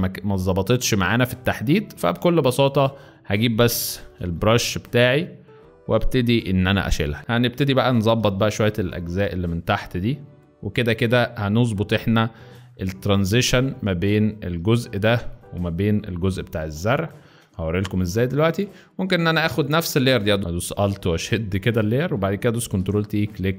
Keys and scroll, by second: 2.2-4.5 typing, 6.5 [, 7.0 [, 7.2 ctrl+alt+shift+Return, 8.2 b, 16.2 v, 17.4 space, 18.7 alt+space, 19.2 alt+shift+space, 20.4 ctrl+Escape, 21.0 ctrl+alt+shift+Escape, 22.3 ctrl+alt+shift+Escape, 22.6 ctrl+alt+shift+t.